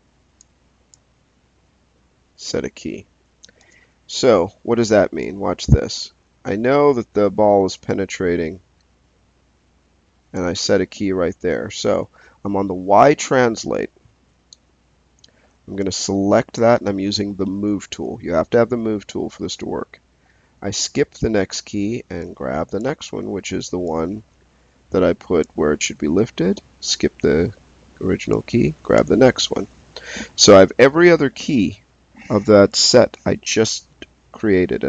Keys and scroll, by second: 3.5 space.